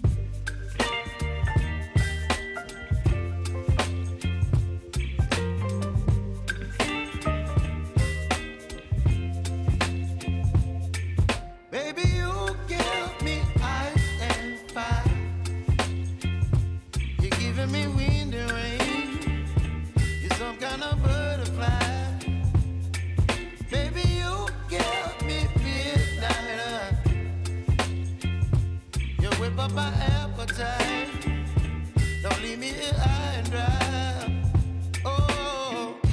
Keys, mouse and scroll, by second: 3.8 s, 4.5-7.2 drag, 7.2 p, 7.9 click, 12.5-19.3 drag, 20.8 ctrl+r, 21.8-23.7 drag, 27.3 click, 34.2-36.1 drag.